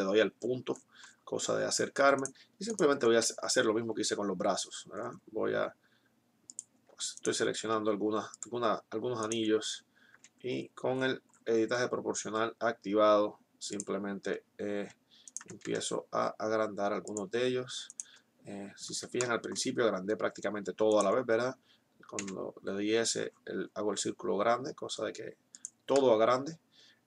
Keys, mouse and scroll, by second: 2.7-4.5 right drag, 2.7 s, 6.5-9.0 drag, 7.0-8.7 right drag, 7.5 s, 10.0 s, 15.2-17.0 right drag, 15.7 s, 17.9 right click, 22.2 s, 26.0-27.0 middle drag.